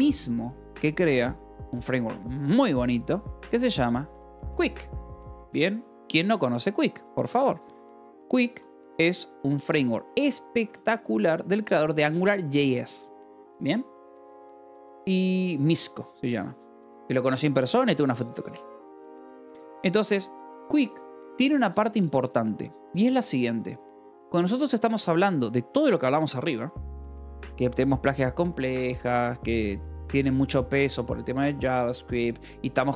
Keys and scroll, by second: 3.1-5.7 typing, 8.1 Escape, 8.3-11.1 typing, 9.4 Escape, 11.2 Escape, 16.9-17.7 typing, 21.8 Escape.